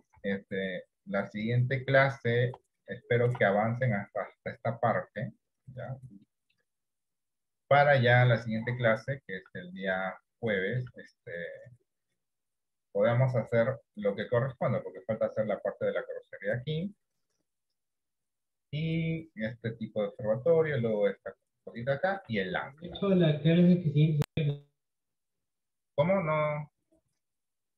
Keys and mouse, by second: 0.4 KP_3, 3.1 shift+middle click, 6.4 middle click, 7.6 middle click, 8.7 shift+middle click, 10.2 shift+middle click, 22.0 shift+middle click, 23.0 shift+middle click.